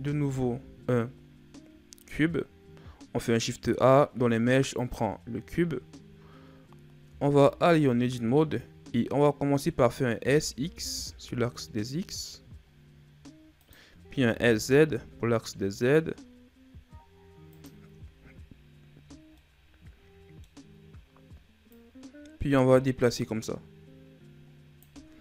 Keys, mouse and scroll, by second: 0.0 shift+a, 6.9 Tab, 18.8-19.2 scroll up 1, 19.2-20.8 middle drag, 20.8-21.6 scroll up 1, 21.6 click.